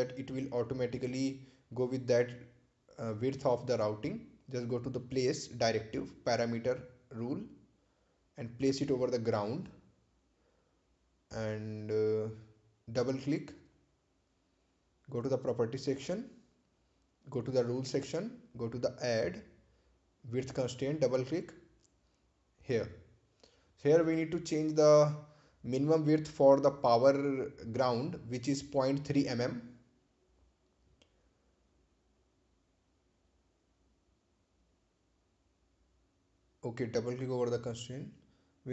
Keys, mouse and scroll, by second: 0.9 scroll up 1, 1.9 scroll down 1, 2.4 scroll up 1, 4.6-5.6 scroll down 1, 7.7 click, 10.2 click, 13.4 click, 15.5 right click, 16.7 click, 20.3 click, 24.1 click, 29.9-33.1 typing, 33.9 Return, 34.9-37.7 drag.